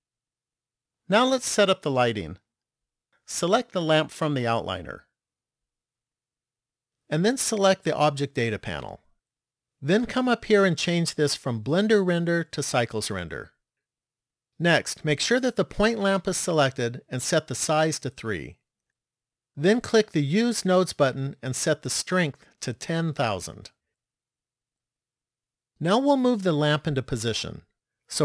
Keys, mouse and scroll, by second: 3.8 click, 5.8 click, 8.1 click, 10.5 click, 17.3 click, 20.5 click, 21.9 click, 23.9 KP_0.